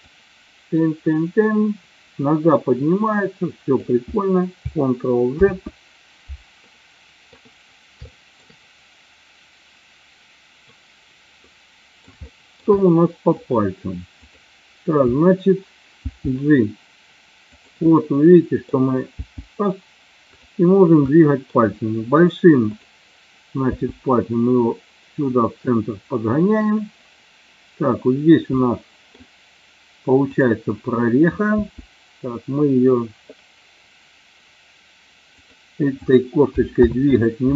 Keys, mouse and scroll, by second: 0.1-3.8 drag, 5.6 ctrl+z, 6.7-7.5 middle drag, 8.1 shift+middle click, 11.6 middle click, 12.3-12.7 shift+middle drag, 12.8 middle click, 16.1 g, 17.6 click, 17.9 middle click, 19.3 g, 20.4 click, 21.2-21.6 middle drag, 23.8 g, 28.7 middle click, 31.7 g, 37.1 ctrl+z.